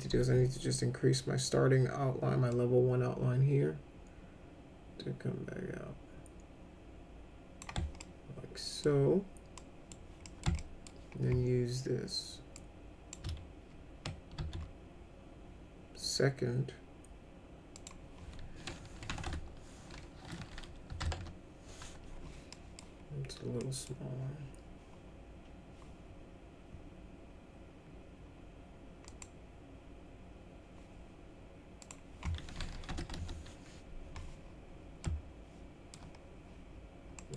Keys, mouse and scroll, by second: 2.5-7.6 drag, 8.0 alt+middle click, 9.6 middle click, 10.3 middle click, 10.6 alt+middle click, 12.6 click, 14.4 ctrl+z, 17.8 click, 19.1 BackSpace, 19.3 BackSpace, 20.6-21.5 typing, 22.5 middle click, 23.6 middle click, 29.1 click, 31.8 click, 32.9 BackSpace, 33.0 5, 35.0 alt+middle click, 37.2 middle click.